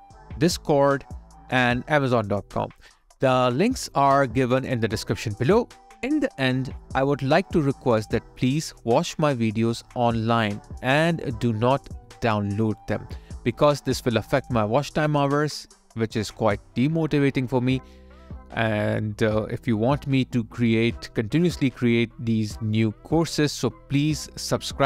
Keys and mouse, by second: 0.6 alt+click, 8.9 alt+click, 12.3 d.